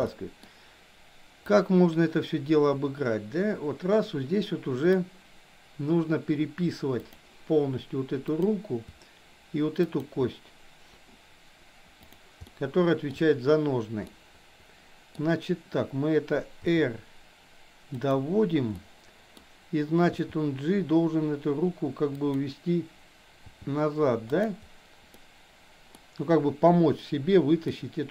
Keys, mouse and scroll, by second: 0.0-0.4 middle drag, 1.5-4.9 drag, 8.3 click, 9.8 shift+click, 12.5-13.2 shift+middle drag, 14.0-15.2 middle drag, 16.7 r, 18.7-19.4 middle drag, 20.2 g, 23.5 g, 25.2 middle click, 27.7-28.1 middle drag.